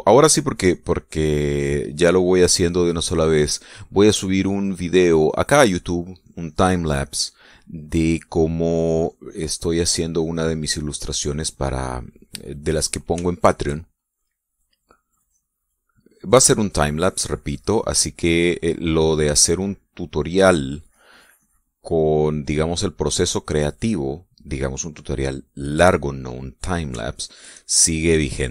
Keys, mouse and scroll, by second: 0.1 shift+middle click, 0.8-4.3 shift+drag, 4.6 click, 6.5 click, 9.1-11.3 drag, 11.4-13.4 drag, 13.8-14.8 shift+middle drag, 15.8 click, 16.5-18.7 drag, 18.9-22.2 drag, 22.3 click, 22.7 click, 23.2-24.8 drag, 27.7-28.5 shift+middle drag.